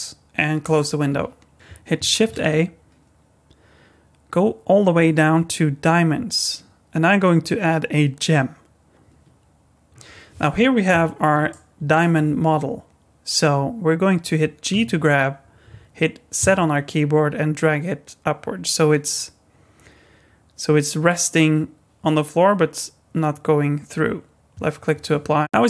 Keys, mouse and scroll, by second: 2.1 shift+a, 11.5 middle click, 12.2-14.6 scroll up 2, 14.7 g, 25.4 middle click, 25.4 scroll down 3.